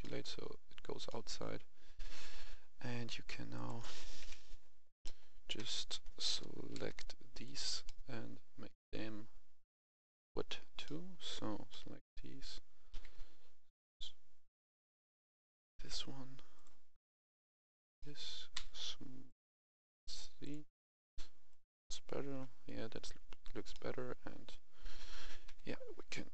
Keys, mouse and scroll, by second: 2.1 a, 3.5 click, 4.1 KP_1, 4.9 middle click, 5.5 KP_1, 6.3 f, 6.7 c, 6.9 click, 7.5 right click, 7.8-9.2 middle drag, 9.7 click, 10.8 middle click, 12.8 u, 14.7 click, 17.9 middle click, 18.5 middle click, 19.2 click, 20.3 click, 23.6 middle click, 25.4 KP_1.